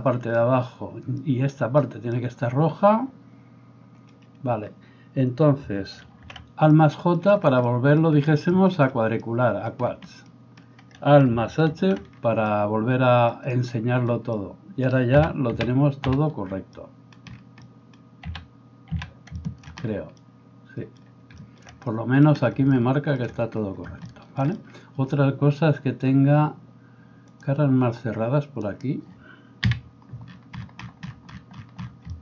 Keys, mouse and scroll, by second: 6.1 alt+j, 11.7 alt+h, 15.2 a, 15.6 a, 16.1 a, 18.3 a, 19.0 a, 28.7-29.7 middle drag, 28.7-29.7 right drag, 29.7 KP_Decimal.